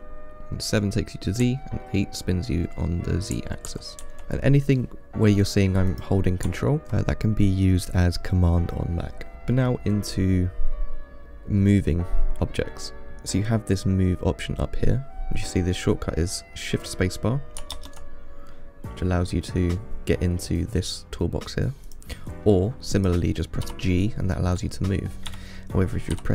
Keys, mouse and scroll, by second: 0.1 KP_5, 0.4 KP_6, 0.4 KP_7, 1.7-2.9 KP_8, 6.1 click, 10.6-12.1 middle drag, 12.1 scroll down 4, 12.6 scroll up 1, 18.0 shift+space, 22.1 click, 23.2 click, 23.9 g.